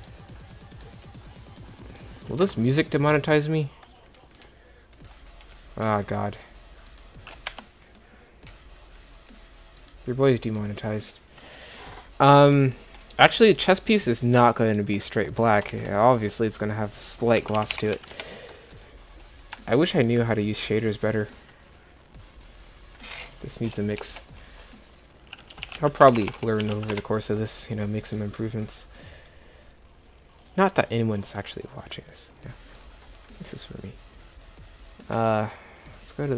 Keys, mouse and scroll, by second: 15.3 click, 15.7 shift+a, 18.0 s, 24.0 shift+a, 26.2 BackSpace, 26.3 BackSpace, 29.1 click, 32.0 click.